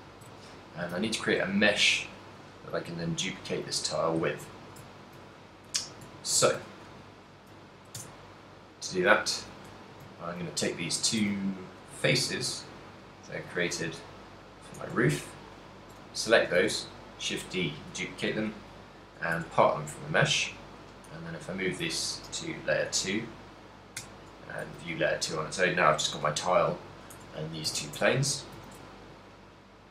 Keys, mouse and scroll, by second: 0.1 ctrl+middle click, 0.5 z, 1.1 shift+middle click, 1.8 middle click, 3.0 right click, 3.3 g, 4.0 right click, 4.2 z, 4.7 shift+middle click, 5.0 ctrl+middle click, 5.8 shift+middle click, 6.3 ctrl+middle click, 6.8 a, 7.5 right click, 8.1 Tab, 9.4 click, 10.0 shift+middle click, 10.2 ctrl+middle click, 10.7 middle click, 11.5 a, 12.0 ctrl+middle click, 12.0 right click, 12.8 z, 13.5 click, 14.1 middle click, 14.1 z, 14.9 right click, 15.5 shift+right click, 16.2 middle click, 16.8 shift+d, 17.8 right click, 18.0 p, 19.5 Tab, 20.0 right click, 20.9 m, 24.1 m, 24.1 2, 25.0 middle click, 25.0 a, 26.6 right click, 27.3 Tab, 27.8 a, 28.0 Tab, 28.4 middle click, 28.7 a, 29.0 shift+middle click.